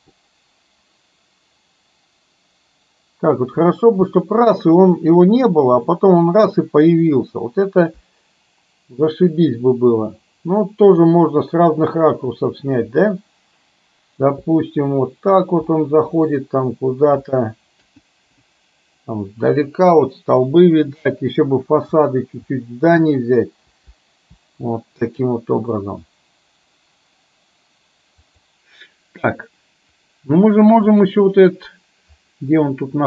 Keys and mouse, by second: 30.1 click, 31.2 click.